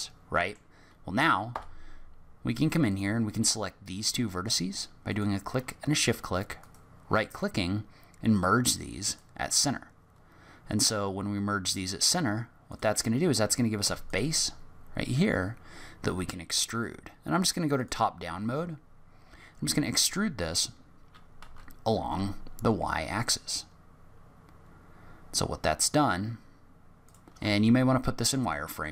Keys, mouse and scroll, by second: 0.0 middle click, 1.5 1, 2.8 click, 5.0 shift+click, 6.6 right click, 12.7 click, 13.8 3, 14.0 click, 17.7 click, 18.8-19.2 scroll down 3, 19.2-19.8 scroll up 1, 19.8 e, 27.4 z.